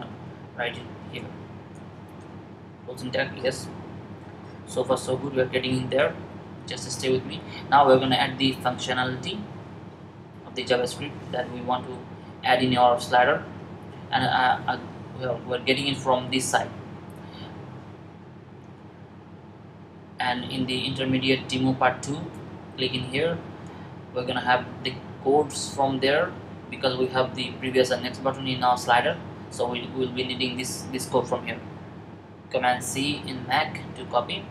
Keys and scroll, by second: 1.8 typing, 6.8-7.3 typing, 32.5 super+c.